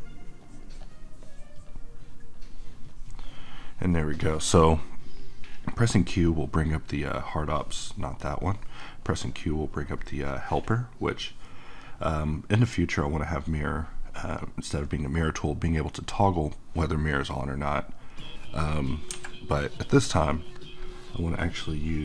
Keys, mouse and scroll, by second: 3.4-6.9 middle drag, 8.2 click, 8.7 q, 16.0 click, 19.1 Escape, 21.6 click, 21.9 q.